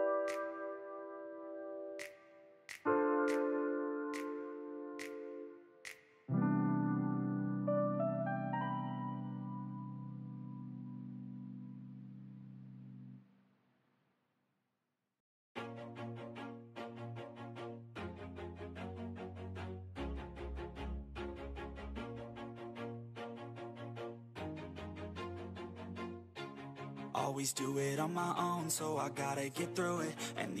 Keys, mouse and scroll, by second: 0.4-1.1 scroll up 5, 0.6 shift+middle click, 1.1 scroll down 4, 1.3 shift+middle click, 1.6 shift+a, 2.6 s, 3.5 o, 3.8 s, 5.1 g, 5.6 shift+middle click, 5.9 scroll up 4, 6.0-7.3 shift+middle drag, 7.3 h, 7.7 ctrl+z, 8.2 g, 9.2 shift+middle click, 9.3 scroll up 5, 9.5 shift+middle click, 9.7-10.1 scroll down 2, 10.1 g, 11.2 click, 12.0-15.7 typing, 18.4 s, 20.0 g, 20.8 e, 22.3 shift+middle click, 22.8 e, 23.5 e, 24.2 s, 27.5 click, 27.6 shift+middle click, 27.9 scroll down 4, 28.2 click, 28.7 click, 30.0 shift+middle click, 30.2-30.6 scroll up 2.